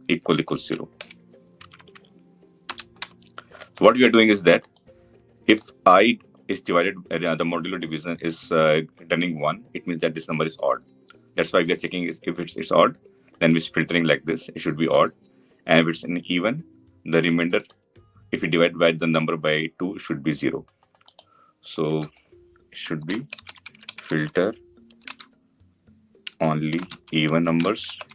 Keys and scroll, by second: 0.7 ctrl+v.